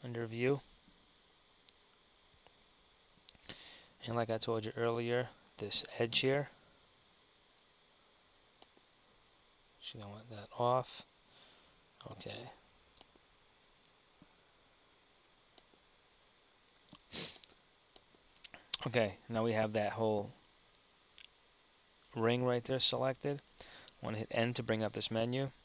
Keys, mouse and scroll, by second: 0.9 KP_1, 3.0 Tab, 17.4 super+z, 23.0 KP_1, 24.3 n.